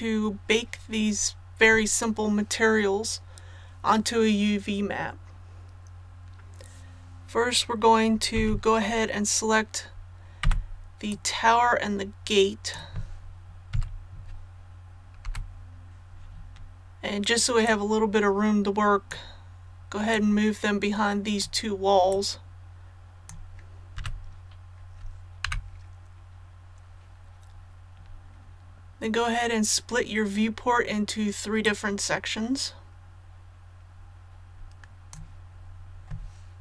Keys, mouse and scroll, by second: 8.4 z, 10.4 b, 11.1-12.9 drag, 13.7 z, 15.2 KP_7, 17.6-23.9 drag, 24.0 a, 25.4 KP_1, 31.6-35.9 drag.